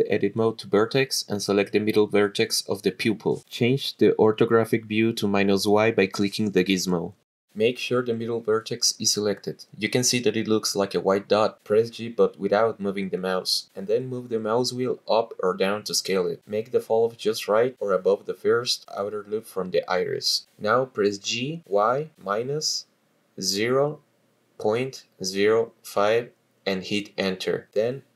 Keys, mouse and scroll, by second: 0.6 click, 1.7 shift+middle click, 2.1 ctrl+shift+middle click, 4.7 click, 7.4 click, 9.4-10.6 shift+middle drag, 14.1 g, 14.8-17.1 scroll up 10, 17.1-17.5 scroll up 1, 17.5-18.3 scroll down 3, 18.3 scroll down 1, 19.6 g, 20.1 y, 22.0 KP_Subtract, 22.4 KP_0, 23.3 ., 23.8 KP_0, 24.6 KP_5, 26.9 Return.